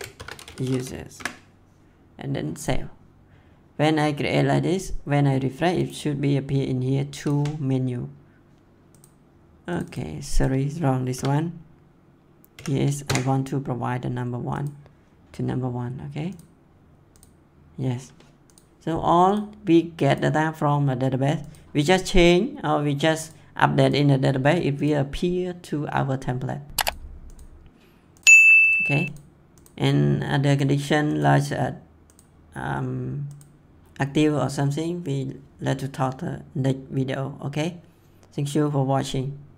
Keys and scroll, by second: 0.0-1.2 typing, 11.0 BackSpace, 12.5 1, 12.9 Return.